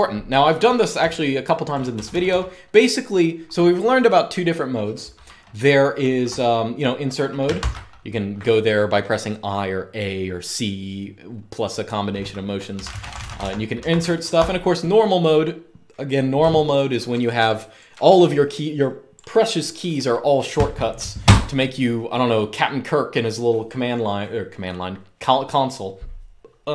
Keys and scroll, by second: 0.7-2.0 typing, 7.3 shift+a, 12.2-14.1 typing.